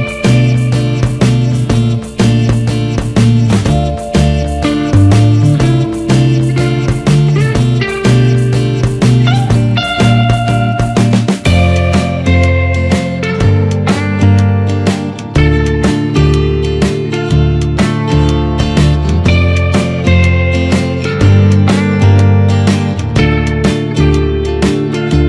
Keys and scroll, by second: 9.4 ctrl+z.